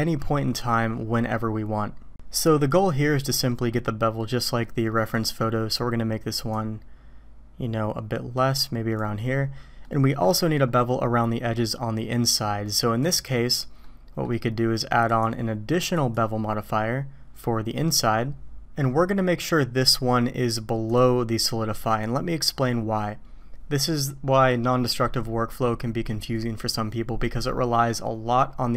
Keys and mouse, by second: 4.6-5.1 middle drag, 6.5-9.0 drag, 9.9 middle click, 13.0 click, 13.8-14.2 middle drag, 15.1-16.1 drag, 21.0 drag, 22.1-22.6 drag.